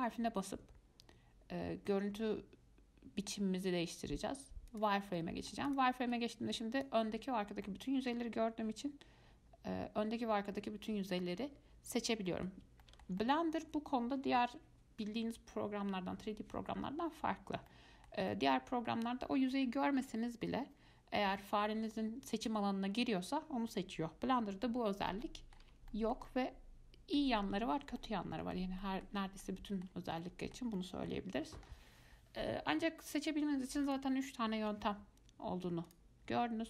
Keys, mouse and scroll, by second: 5.4 middle click, 5.9 click, 6.3 click, 7.9-10.9 middle drag, 13.0-16.5 shift+middle drag, 17.9-21.5 shift+middle drag, 22.5 click, 25.4-34.0 middle drag, 34.1 click, 34.8 z.